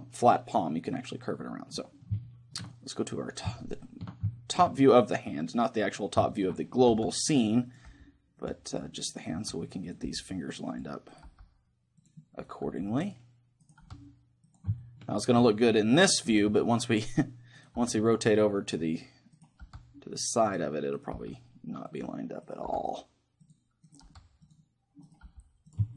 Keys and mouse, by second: 1.8-3.7 middle drag, 7.0 r, 7.8-9.1 drag, 7.9 g, 9.4 g, 10.1 r, 10.9 click, 11.3 g, 12.7 g, 13.8 g, 14.8-16.6 drag, 15.9-17.0 right drag, 16.4 g, 17.8 g, 19.6 g, 20.5 right click, 21.2 g, 22.7 g, 24.1 g, 25.3 g.